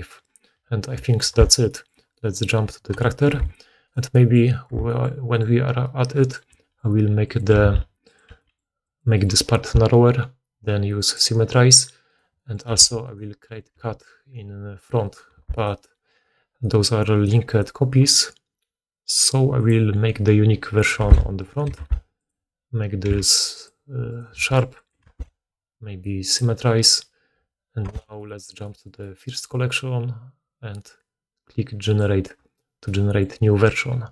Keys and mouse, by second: 1.2 1, 3.2 2, 3.8 right click, 4.6 Tab, 5.2 middle click, 5.2 right click, 7.1 g, 7.5-11.0 middle drag, 7.5 g, 8.2 g, 9.5 Tab, 11.0-22.3 drag, 12.0 right click, 12.6 Tab, 13.0 right click, 13.7 g, 15.3 Tab, 15.5 right click, 17.1 middle click, 17.1 right click, 17.4 middle click, 17.4 right click, 20.9 Tab, 21.3 middle click, 21.3 right click, 21.6 g, 22.3-26.2 middle drag, 23.0 v, 24.0 right click, 24.3 g, 25.0 Tab, 26.2-34.1 drag, 27.8 1.